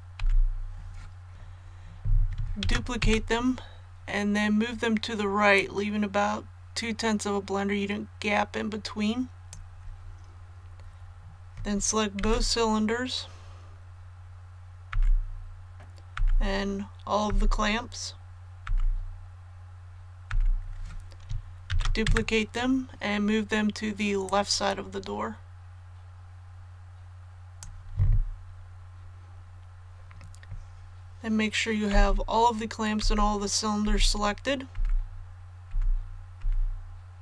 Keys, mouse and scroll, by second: 1.3 ctrl+z, 2.5 shift+d, 5.5-10.2 drag, 21.6 shift+d, 24.2-28.2 drag, 31.8 typing, 33.8-37.2 typing.